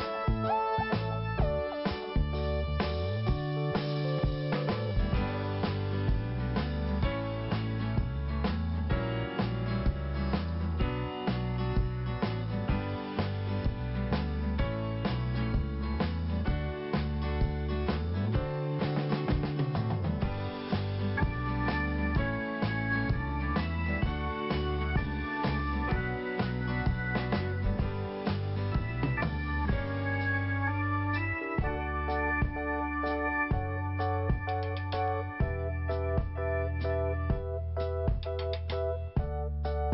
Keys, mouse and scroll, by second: 0.6 scroll down 1, 1.2-1.8 scroll up 1, 2.2 click, 2.3 click, 2.6 click, 2.7 double click, 3.9 double click, 7.3 scroll down 1, 8.5 scroll up 1, 9.2 click, 10.4 scroll down 1, 11.1 scroll up 1, 12.1 scroll down 1, 14.2 click, 14.3 click, 14.4 double click, 14.6 double click, 14.6 double click, 14.9 double click, 15.1 double click, 15.3 double click, 15.4 double click, 15.7 double click, 15.8 double click, 16.1 double click, 16.2 double click, 16.5 double click, 16.5 double click, 18.2 click, 19.8 scroll up 1, 20.4 scroll up 1, 20.9 click, 21.0 click, 22.0 click, 22.3 click, 22.8 scroll down 2, 24.6 scroll up 1, 31.1 click, 35.0-35.8 scroll down 1, 36.8 click, 38.7 scroll up 1, 39.7 click.